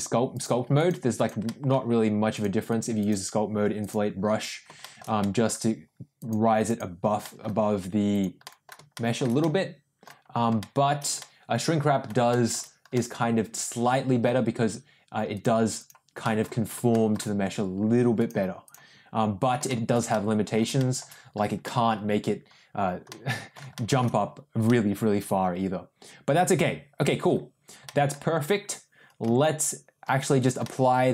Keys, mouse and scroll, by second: 0.3 click, 0.7 click, 1.1 click, 1.4 middle click, 2.3 click, 2.6 click, 2.9 click, 3.8 click, 4.8 shift+middle click, 5.2 middle click, 6.1 click, 6.6 click, 7.2 middle click, 8.1 click, 8.4 middle click, 8.9 shift+middle click, 9.4 middle click, 10.5 shift+middle click, 11.1-12.5 middle drag, 12.9-14.2 middle drag, 15.3 click, 15.7 click, 16.2 middle click, 16.9 shift+middle click, 18.1 click, 18.6 click, 19.6 shift+middle click, 20.1 middle click, 20.7 shift+middle click, 21.6 middle click, 23.0 middle click, 24.6-27.2 middle drag, 27.8 middle click, 29.2 Tab, 30.1 Tab, 30.6-31.1 middle drag.